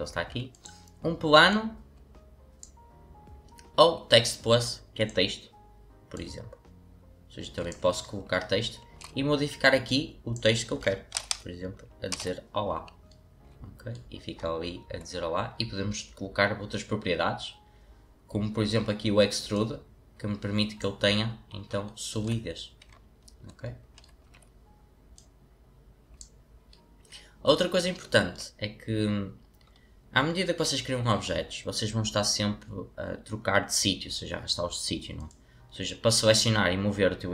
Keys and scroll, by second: 10.9-12.2 typing, 13.2-13.8 typing, 24.2 w.